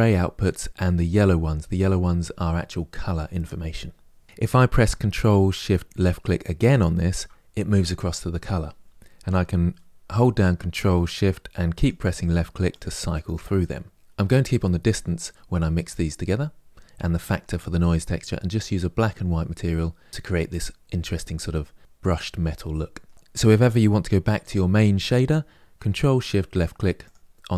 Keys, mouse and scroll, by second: 6.4 ctrl+shift+click, 11.6 ctrl+shift+click, 12.0 ctrl+shift+click, 12.5 ctrl+shift+click, 12.9 ctrl+shift+click, 13.4 ctrl+shift+click, 21.0-26.9 middle drag, 26.9 ctrl+shift+click.